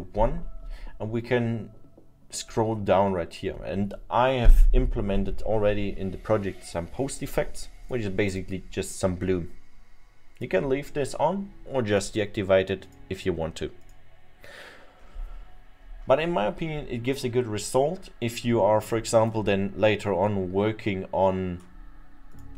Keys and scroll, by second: 1.8 Return.